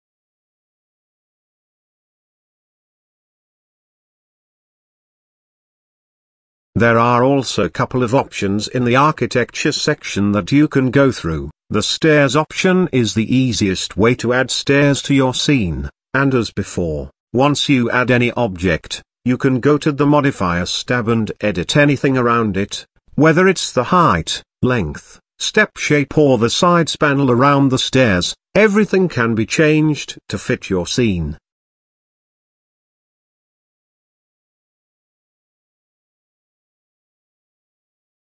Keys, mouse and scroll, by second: 0.3 click, 1.8-2.8 middle drag, 2.9-5.3 middle drag, 5.3 j, 13.8-15.9 middle drag, 16.2 g, 18.7-19.6 middle drag, 19.6-21.6 scroll up 3, 21.6 click, 22.6-24.2 scroll down 2, 24.2-24.7 scroll down 1, 24.7-27.3 drag, 27.4-28.4 middle drag, 28.4 ctrl+z, 28.5 shift+middle click, 28.8-29.8 drag, 29.9-35.2 drag, 35.2 scroll down 4, 36.5-38.0 scroll down 6.